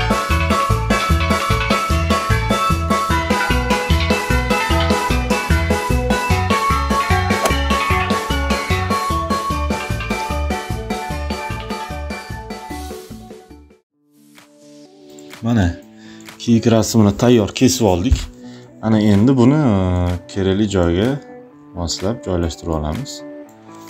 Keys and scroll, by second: 2.4 space, 4.3 space, 5.3 ctrl+alt+z, 5.5 ctrl+alt+z, 8.8 space, 9.1 [, 11.0 space, 11.6 ], 15.2 space, 23.6 Return.